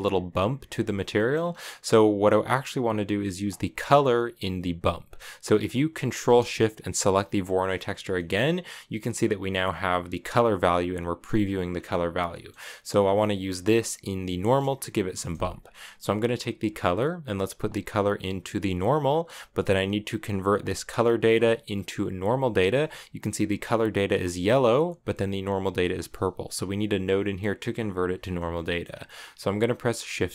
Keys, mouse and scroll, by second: 0.9 middle click, 1.1-3.2 scroll up 2, 3.2-5.5 drag, 6.9 ctrl+shift+click, 7.9 shift+middle drag, 8.1-8.7 scroll up 4, 11.5 scroll down 1, 12.1-15.1 shift+middle drag, 16.4-19.4 drag, 20.3-21.5 drag, 23.4-24.6 drag, 28.4 middle click, 28.7-29.7 scroll up 1, 29.7 scroll up 1, 29.8 shift+a.